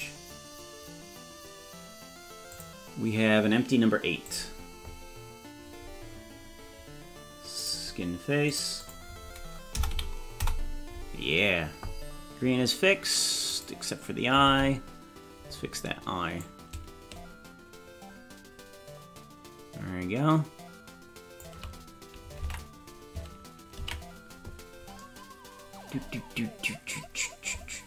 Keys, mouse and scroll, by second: 2.5 click, 4.2 click, 7.6 click, 8.5-11.0 drag, 13.6 right click, 14.5 ctrl+Tab, 16.4-21.6 drag, 22.4 ctrl+Tab, 24.0 ctrl+s, 26.4-26.8 scroll up 2.